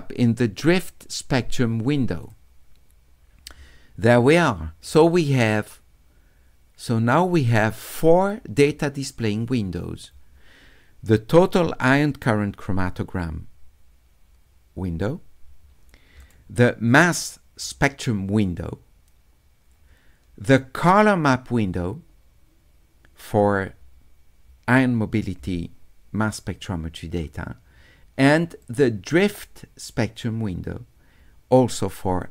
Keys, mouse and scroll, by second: 5.5-7.5 drag, 16.2 click, 28.6 click.